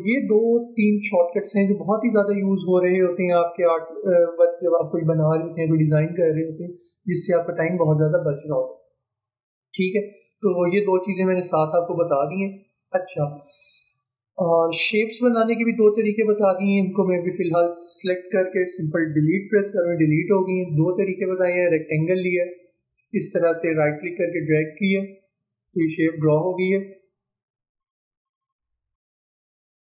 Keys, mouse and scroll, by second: 2.4 space, 16.8-19.6 drag, 21.8-28.9 drag.